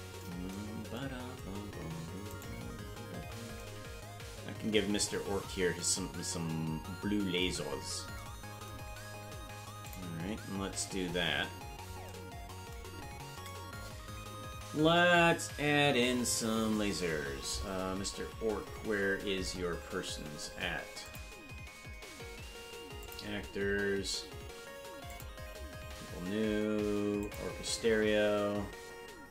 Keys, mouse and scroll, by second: 2.5 right click, 3.0 KP_Decimal, 9.8 click, 17.8-19.3 scroll up 21, 19.4-21.0 scroll down 11, 21.0 click, 23.0 click, 23.3-23.9 scroll down 4, 25.1 click, 25.5-26.0 scroll down 3, 27.2 click.